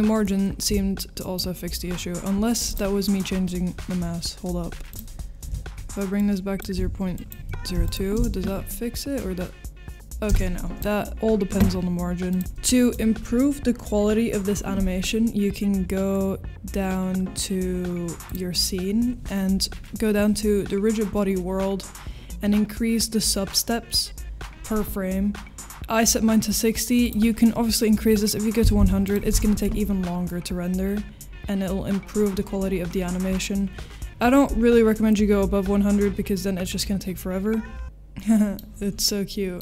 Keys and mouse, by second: 2.7 click, 4.9-8.4 drag, 10.4 space, 10.7-12.4 drag, 12.4 ctrl+s, 12.4 space, 18.3-29.2 drag, 37.7 middle click, 38.9 middle click.